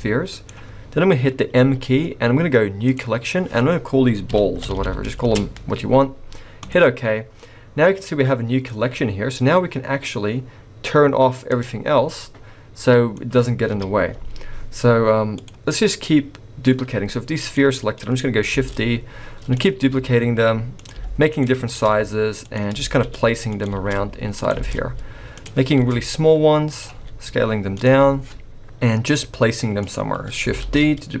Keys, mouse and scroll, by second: 1.5 m, 4.7 l, 11.5 click, 11.9-12.3 scroll down 3, 12.1 middle click, 13.6 KP_1, 14.3-14.9 scroll up 1, 14.9 scroll up 1, 15.4 click, 16.8-17.2 scroll up 2, 17.4 click, 17.7-18.5 scroll down 2, 18.5 shift+d, 19.7 s, 20.9 g, 21.7 shift+d, 23.0 shift+d, 23.9 shift+d, 24.6 shift+d, 25.8 shift+d, 26.9 s, 27.9 g, 28.6-29.1 scroll up 1, 29.1 g, 30.6 shift+d.